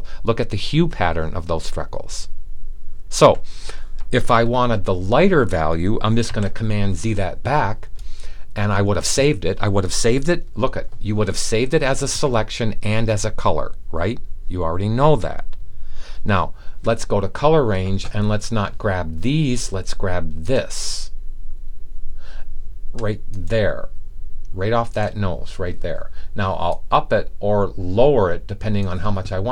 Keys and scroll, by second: 6.1 super+z.